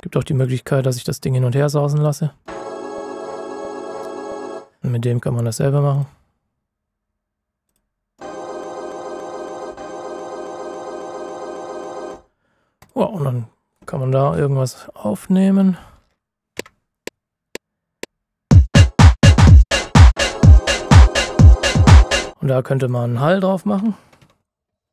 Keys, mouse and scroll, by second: 4.8 click, 12.8 click, 14.5 ctrl+scroll down 1, 15.0 ctrl+shift+scroll up 1, 15.7-16.0 scroll up 1, 16.5 KP_Multiply, 22.3 space, 22.8 click, 23.5-24.9 typing, 24.8 click.